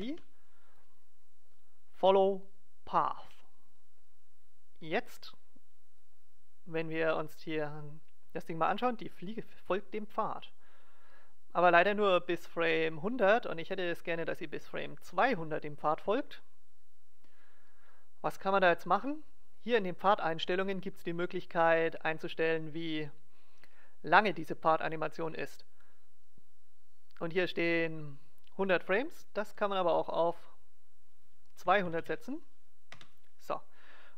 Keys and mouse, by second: 6.0-7.6 drag, 19.5-21.3 drag, 21.3-24.0 middle drag, 29.2-31.0 drag, 31.0 middle click.